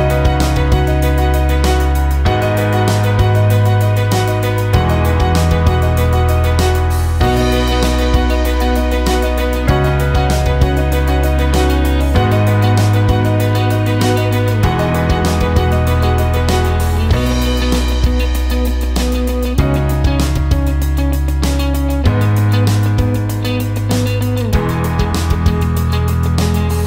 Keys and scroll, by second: 11.7 ctrl+z.